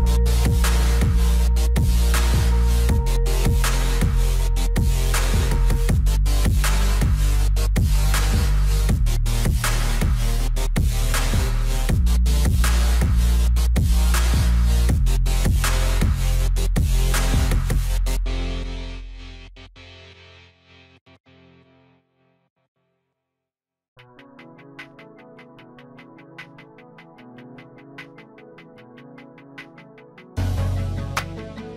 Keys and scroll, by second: 4.9 F4, 15.2 alt+w, 29.3 alt+w.